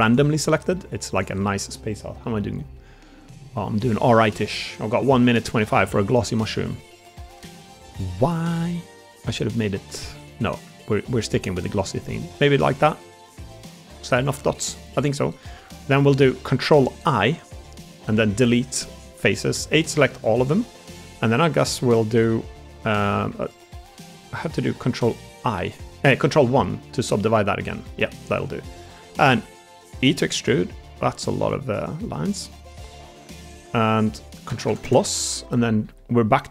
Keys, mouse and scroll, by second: 0.3 middle click, 1.1 shift+click, 1.3 middle click, 2.3 middle click, 2.4 scroll up 1, 2.5 middle click, 4.7 middle click, 5.3 shift+middle click, 6.7 middle click, 7.9 middle click, 9.5 middle click, 9.9 ctrl+z, 10.6 middle click, 11.2 middle click, 11.8-12.8 middle drag, 13.3 middle click, 14.3 middle click, 16.0 middle click, 17.1 ctrl+i, 18.0 Delete, 19.4 a, 19.8 middle click, 20.6 middle click, 21.8 middle click, 23.2 Tab, 24.5 ctrl+1, 25.3-26.0 middle drag, 26.6 Tab, 27.1 Tab, 28.7 Tab, 29.9 e, 31.6 click, 34.4 ctrl+KP_Add, 35.7 ctrl+KP_Add, 35.7 g.